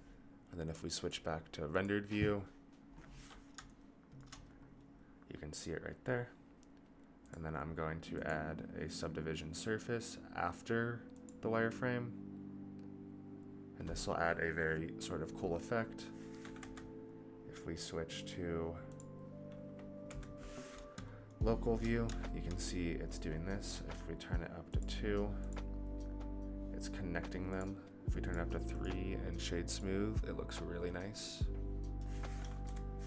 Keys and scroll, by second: 16.5 KP_Divide, 20.0 KP_Divide, 32.7 KP_Divide.